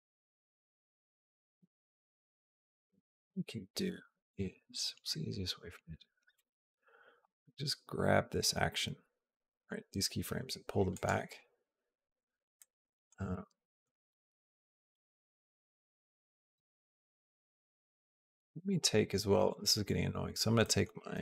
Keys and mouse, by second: 1.1 click, 7.1 g, 12.4 alt+middle click, 13.1 middle click, 14.1 middle click, 14.9-16.2 shift+middle drag, 16.5 shift+middle click, 17.9 shift+middle click, 19.3 click, 20.5 middle click.